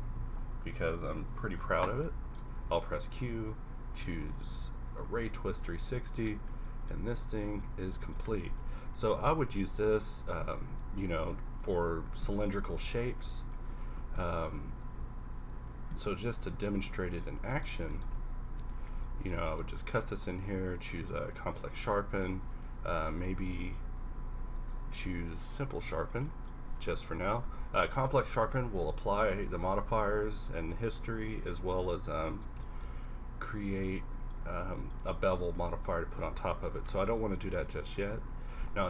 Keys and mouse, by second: 2.6 q, 6.4 Tab, 7.1 ctrl+r, 8.2 Tab, 8.6 KP_1, 8.7 KP_1, 9.0 r, 10.4 shift+a, 12.1 g, 13.0 s, 13.9 s, 15.0 s, 15.7 g, 16.7 z, 17.3 z, 18.5 ctrl+KP_Subtract, 18.9 a, 20.0 q, 22.6 ctrl+z, 24.0 z, 24.3 z, 24.9 q, 26.8 KP_1, 26.9 KP_1, 29.5 Tab, 30.0 ctrl+r, 31.1 ctrl+r, 33.1 Tab, 38.6 Tab.